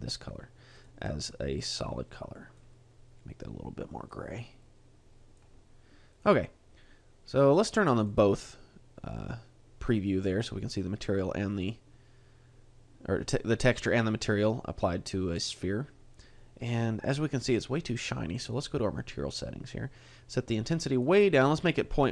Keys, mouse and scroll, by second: 0.3 click, 2.3 click, 8.0 click, 18.5 click.